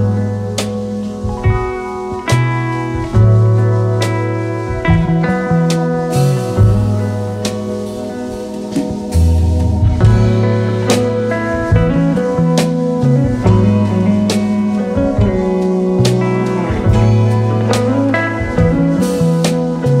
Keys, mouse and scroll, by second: 3.6-4.7 typing, 13.0-13.8 typing, 15.0 alt+Left, 15.3 alt+Left, 15.8 alt+Left, 16.5 alt+right click, 18.1 ctrl+scroll down 2.